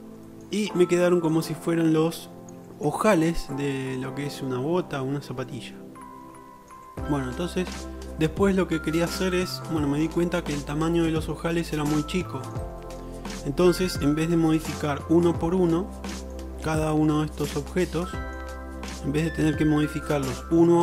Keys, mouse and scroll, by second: 0.4-1.3 shift+middle drag, 3.5-3.9 shift+drag, 3.9-6.0 shift+middle drag, 9.5 drag, 10.0 scroll up 1, 10.3 shift+middle click, 11.9-12.5 middle drag, 12.8-14.6 shift+middle drag, 17.1-17.5 shift+middle drag, 18.1 middle click.